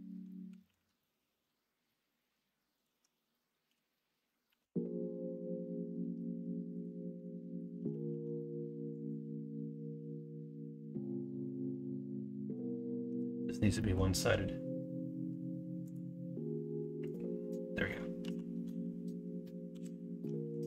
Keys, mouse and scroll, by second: 0.4 s, 3.6 s, 8.0 ctrl+r, 11.4-12.6 middle drag, 13.0 Tab, 13.8 middle click, 18.2 KP_1, 18.6 KP_3, 19.7 KP_9.